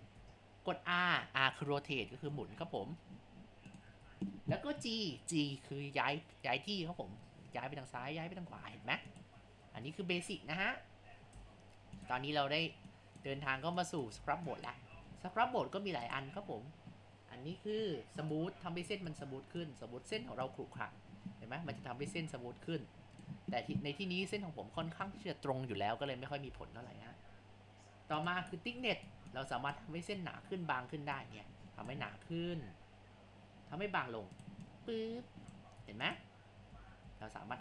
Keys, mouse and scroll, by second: 0.2 ctrl+z, 1.9 r, 4.1 ctrl+z, 6.8 g, 9.7 ctrl+z, 10.8 scroll up 1, 11.3 Tab, 12.3 scroll down 1, 12.9-13.5 drag, 13.5 ctrl+z, 13.8 click, 14.2 ctrl+z, 14.6 click, 15.0 ctrl+z, 16.1-18.2 drag, 18.2-20.5 right drag, 20.5-23.6 drag, 24.4 middle click, 25.0-26.2 middle drag, 26.0 scroll down 3, 26.5 ctrl+z, 28.2 click, 29.0-31.3 right drag, 31.3-32.5 drag, 32.5 ctrl+z, 34.7-35.8 drag, 35.8 Tab, 36.7 ctrl+z, 37.0 ctrl+z.